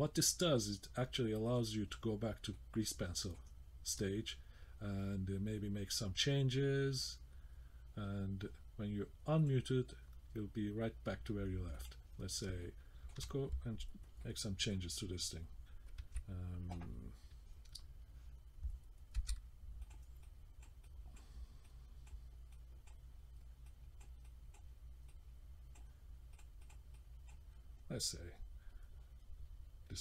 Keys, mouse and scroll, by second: 1.5 click, 2.5 middle click, 3.5-4.0 scroll up 1, 6.2 middle click, 8.3-8.7 scroll up 1, 9.4 click, 11.8 click, 12.6 shift+middle click, 14.2 middle click, 19.2 f, 20.2 click, 20.8 click, 21.7 click, 22.5 click, 23.7 click, 24.2 click, 25.1 click, 26.3 click, 26.6 click, 26.9 click.